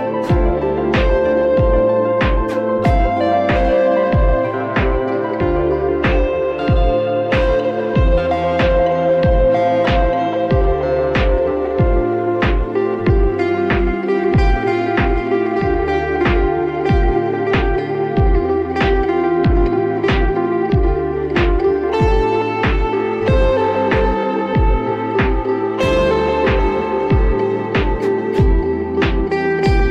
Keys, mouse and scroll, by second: 0.2 s, 2.6 g, 7.0 click, 8.2 Tab, 9.1-9.7 scroll down 3, 9.7 scroll up 1, 9.7-10.4 middle drag, 10.4 drag, 12.5-14.1 drag, 14.1-15.1 middle drag, 15.1 click, 15.4 click, 15.8 Tab, 16.5 click, 17.1 a, 17.4-18.4 middle drag, 18.4-18.9 scroll up 1, 20.2 ctrl+click, 20.7 ctrl+click, 21.1 ctrl+click, 21.9 click, 22.4 click, 24.1 ctrl+z, 24.6 a, 25.6 shift+click, 26.2 shift+click, 26.5 shift+click, 27.0 shift+click, 27.5 shift+click, 28.2 shift+click, 28.7 shift+click, 29.0 shift+click, 29.4 shift+click.